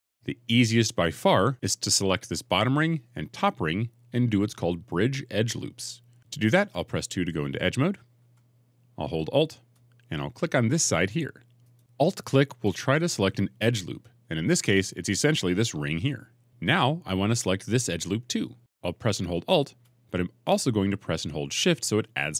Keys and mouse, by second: 8.1 2, 11.5 alt+click, 16.1 middle click.